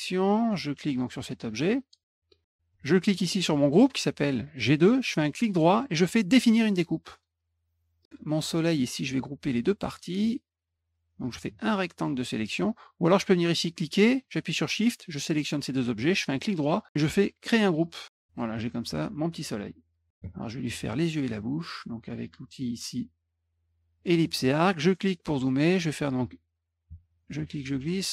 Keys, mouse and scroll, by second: 0.8-1.9 drag, 3.1 shift+click, 5.1 right click, 7.1 click, 8.0 click, 9.2-9.8 drag, 11.2-12.5 drag, 13.5 click, 14.4 shift+click, 17.0 click, 18.2-20.1 drag, 23.4 click, 24.3 middle click, 24.5 middle click, 24.8 scroll up 1, 25.7-27.4 drag.